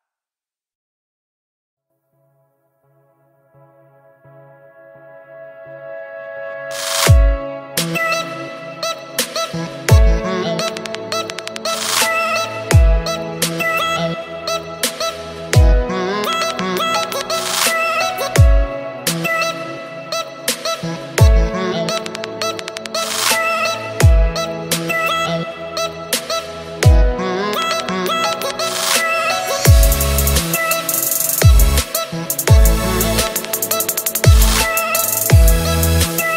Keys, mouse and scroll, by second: 0.4 ctrl+click, 0.7 ctrl+v, 1.2 click, 2.0 ctrl+v, 2.5-5.8 drag, 7.8-15.8 drag.